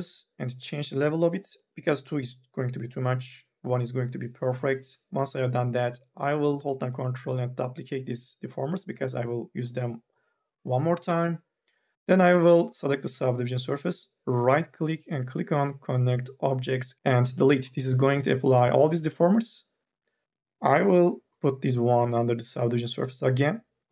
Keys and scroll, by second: 11.9 ctrl+z.